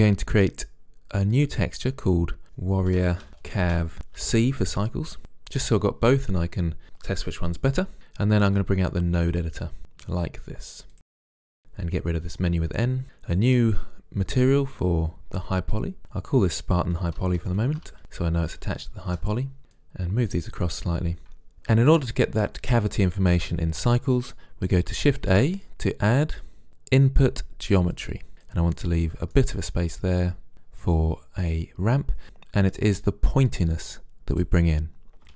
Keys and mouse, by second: 1.4-3.3 drag, 3.3 r, 9.4-11.3 drag, 12.1 n, 14.4-17.5 drag, 19.6-21.3 drag, 25.3 shift+a, 28.3-31.7 drag, 33.5-35.1 drag.